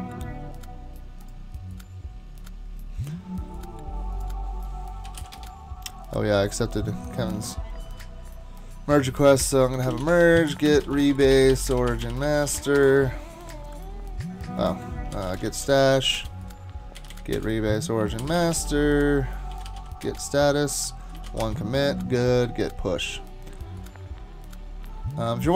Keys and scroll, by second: 4.8-5.7 typing, 9.3 Escape, 9.7-13.1 typing, 14.9-21.3 typing, 21.4 Return.